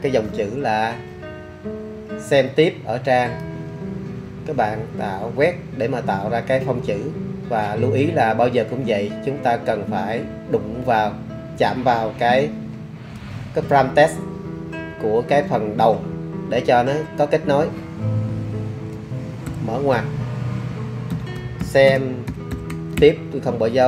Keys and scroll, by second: 19.5 shift+9, 20.9-23.2 typing.